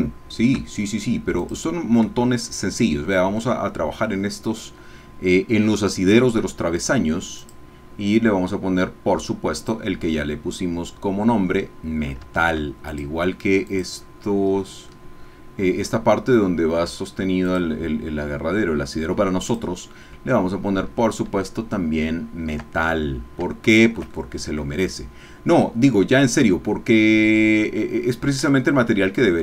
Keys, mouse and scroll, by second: 1.4 click, 2.1-3.6 shift+middle drag, 7.4 click, 13.0 shift+click, 13.8 click, 14.2 click, 15.1-17.4 middle drag, 17.4 click, 19.6 click, 21.6-22.7 shift+middle drag, 22.9-23.4 scroll down 1, 23.5-28.4 shift+middle drag, 28.6 ctrl+middle click, 28.8 ctrl+click.